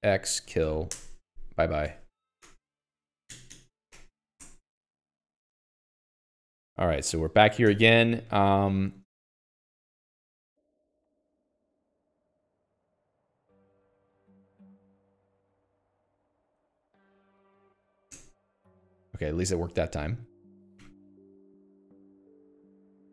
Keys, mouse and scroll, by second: 0.0-1.5 typing.